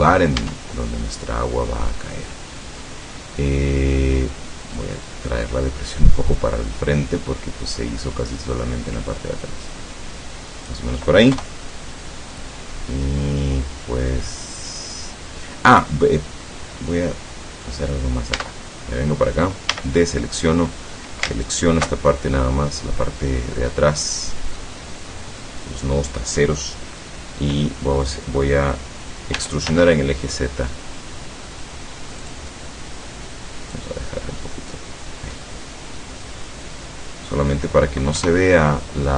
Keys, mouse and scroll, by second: 0.4 Tab, 0.8-4.4 middle drag, 4.8-11.0 drag, 11.3 KP_0, 16.5-17.9 middle drag, 18.4 Tab, 19.2-19.5 scroll down 2, 19.8 a, 20.1 scroll up 2, 21.5 alt+shift+right click, 22.5-23.6 drag, 23.8-24.8 drag, 29.4 e, 32.2 click, 32.6 middle click, 33.8-34.9 drag, 35.4-37.8 middle drag, 38.2 KP_0.